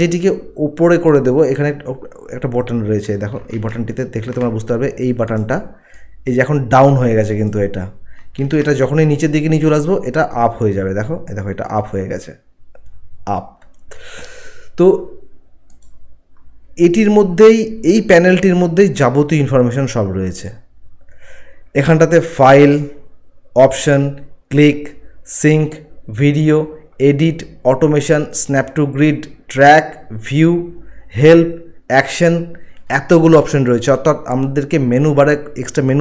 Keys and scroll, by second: 3.6 ctrl+1, 8.4 ctrl+1.